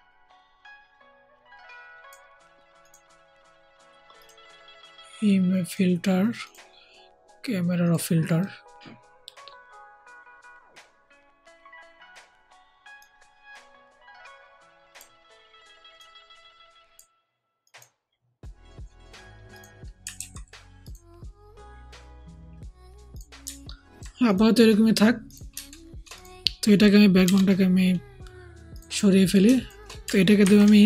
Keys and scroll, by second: 20.1 ctrl+z, 27.2 BackSpace, 30.3 ctrl+shift+g.